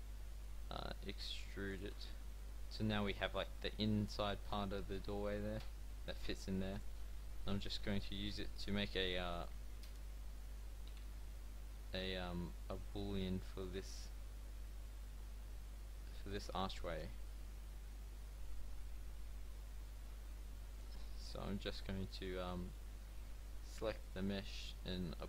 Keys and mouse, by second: 0.9 e, 1.8 Tab, 4.4 click, 4.7 g, 7.4 KP_7, 8.9 g, 9.6 r, 12.3 g, 14.2 r, 17.0 g, 21.2-24.1 drag, 24.1-25.2 middle drag.